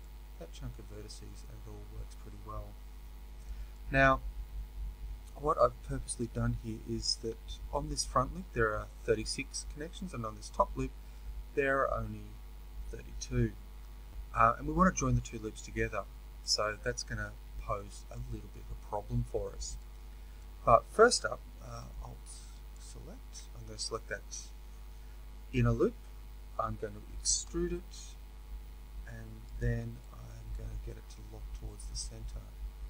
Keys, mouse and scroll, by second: 0.0-22.8 middle drag, 22.8 alt+click, 27.3 e, 30.0-32.8 middle drag.